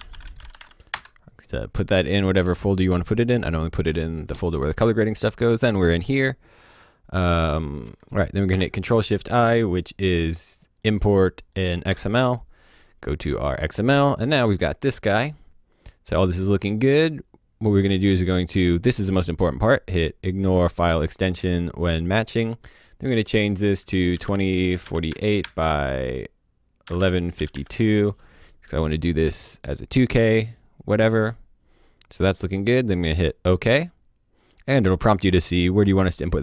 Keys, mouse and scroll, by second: 0.0-1.0 typing, 3.7 click, 7.4 click, 8.5 ctrl+shift+i, 10.7 click, 11.9 KP_Enter, 20.4 click, 22.4 click, 24.1 KP_2, 24.8 KP_4, 25.0 KP_8, 25.4 Tab, 26.8 KP_1, 27.3 KP_5, 27.5 KP_2, 28.8 click, 31.2 click, 33.2 click.